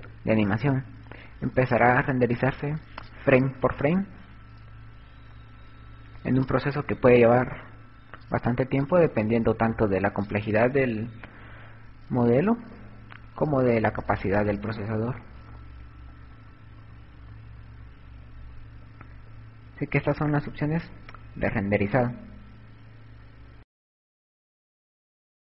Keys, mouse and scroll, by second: 14.0 Escape, 15.5-20.8 typing.